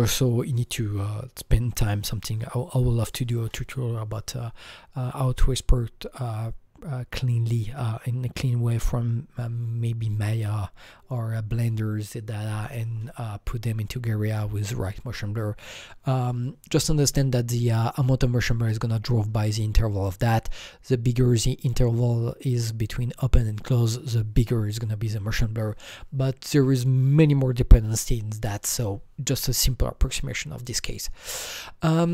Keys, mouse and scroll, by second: 31.0 click.